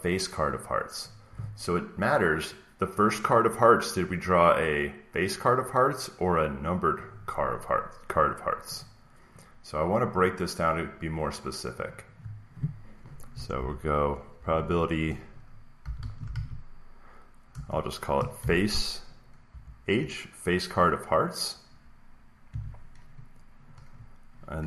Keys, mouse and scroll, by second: 0.4 click, 8.7 click, 10.1 click, 11.8 click, 13.5-14.3 typing, 15.5-17.4 typing, 20.3 ), 22.4 =, 23.7 Down.